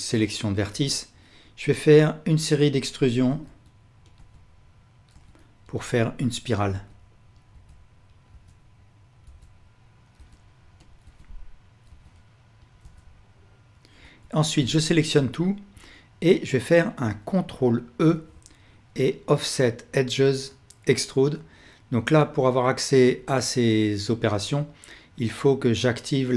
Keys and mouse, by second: 2.7 e, 3.5-14.0 e, 14.0 a, 14.8-17.0 ctrl+alt+drag, 18.1 ctrl+e.